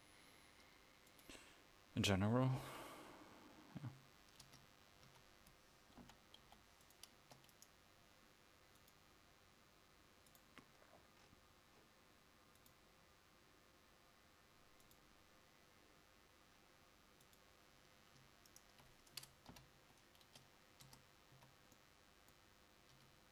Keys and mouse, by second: 1.6-4.5 drag, 4.5 Tab, 5.1 a, 6.1 l, 6.5 p, 7.2 Tab, 17.8 click, 19.6 ctrl+j, 20.3 Tab, 21.4 a, 23.0 Tab.